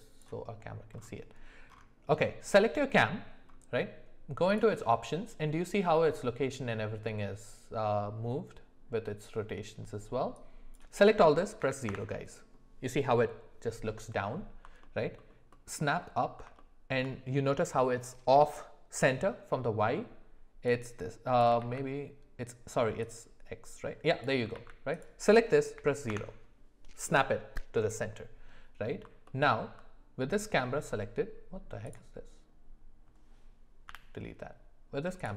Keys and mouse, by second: 2.4-2.7 drag, 4.5 click, 10.3-12.7 drag, 15.1 alt+middle click, 16.5-16.9 shift+middle drag, 20.6 click, 21.6 ctrl+z, 23.0-24.2 drag, 24.5 ctrl+z, 24.9-26.1 drag, 33.9 Delete, 35.2 click.